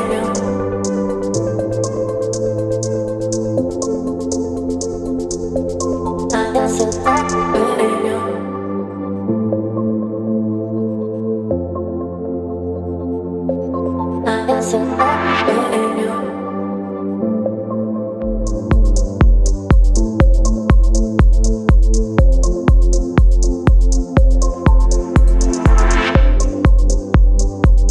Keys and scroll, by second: 3.9 space, 6.7 [, 7.2 [, 11.3 space, 12.3 ], 14.6 space, 19.6 space, 21.0 space, 23.8 b.